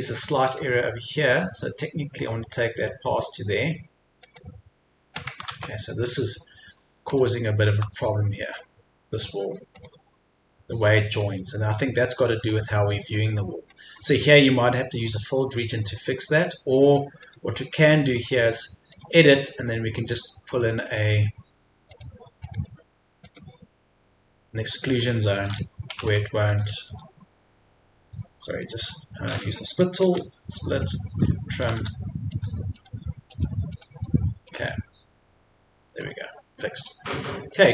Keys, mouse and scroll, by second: 0.4-3.8 drag, 7.1 Escape, 9.7 click, 10.7 Escape, 11.0 scroll down 1, 11.2 Escape, 12.2-12.5 scroll up 1, 12.9 scroll down 1, 13.0 Escape, 13.6-14.0 scroll up 1, 14.2 Escape, 15.1-16.3 scroll down 2, 15.4 Escape, 16.3 scroll up 1, 16.6 Escape, 17.2 click, 17.9-18.9 scroll down 1, 18.9 click, 19.4-19.8 scroll up 1, 20.8 click, 25.0 Escape, 26.5 click, 28.0 Escape, 30.8 click, 31.4-32.3 typing, 32.3 click, 33.9 Escape, 34.5 click, 35.7 Escape, 36.0-36.5 scroll down 1, 36.8 Escape, 37.2-37.6 scroll up 1.